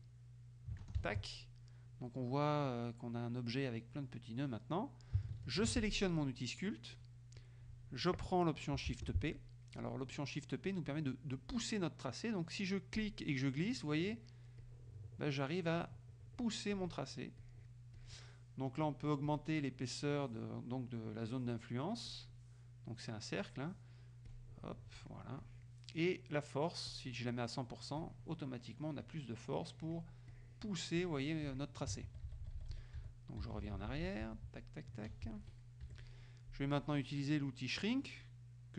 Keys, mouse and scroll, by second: 1.1 ctrl+alt+c, 1.6 ctrl+alt+click, 5.7 shift+F2, 6.4 click, 8.9 shift+p, 13.0-14.4 drag, 14.7 click, 15.8 click, 16.8 click, 17.7 click, 18.0 click, 19.3 click, 22.2 click, 24.4 click, 25.5 click, 26.9 click, 28.1-29.3 drag, 29.5 click, 30.4 click, 31.1 click, 31.5 click, 32.1 ctrl+z, 35.4 ctrl+f.